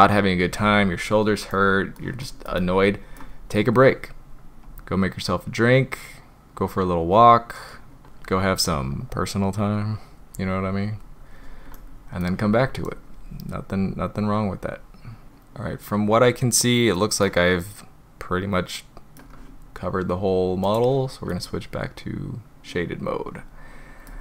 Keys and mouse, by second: 1.5-2.0 middle drag, 2.2 shift+middle drag, 2.6 middle click, 4.7-6.9 drag, 8.9-10.2 drag, 10.4-10.9 drag, 11.7-12.3 middle drag, 13.9-15.2 drag, 15.2-17.0 middle drag, 17.3-19.2 middle drag, 20.7 click, 21.4-24.1 middle drag.